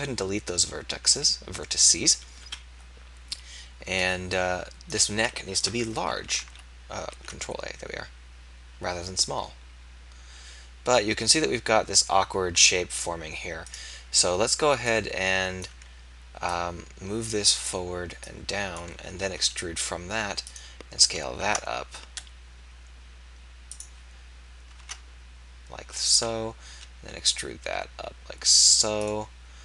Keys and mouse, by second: 2.4 click, 2.4 KP_3, 5.0 click, 6.4 alt+a, 7.2 ctrl+a, 19.5 click, 19.5 e, 21.4 ctrl+a, 26.7 ctrl+a, 26.7 e.